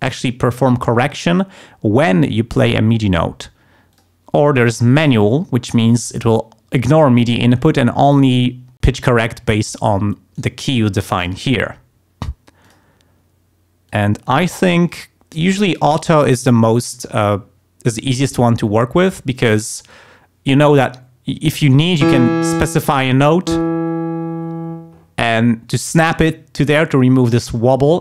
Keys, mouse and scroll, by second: 3.9 click, 10.3 right click, 11.2 click, 12.6 click, 13.9 click, 14.9 click, 15.4 click.